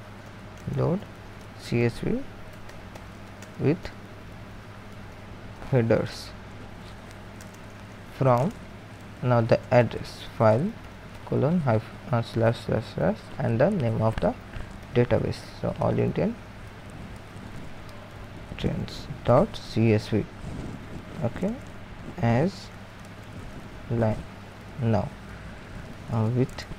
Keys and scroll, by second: 0.0-5.5 typing, 7.2-12.0 typing, 13.1-13.9 typing, 15.2-24.0 typing, 25.6-26.7 typing.